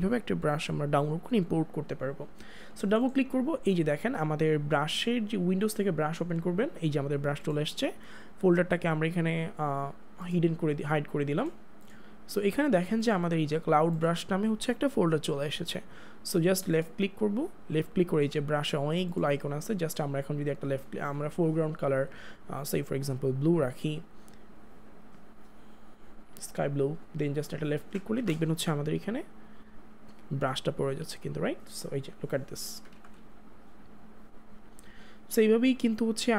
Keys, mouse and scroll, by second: 2.9 click, 5.6 click, 10.2 click, 16.7 click, 17.5 scroll down 1, 19.2 click, 23.0 click, 25.6 click, 29.7 ], 30.4 ], 30.9 click, 32.9 ctrl+z, 33.8 click.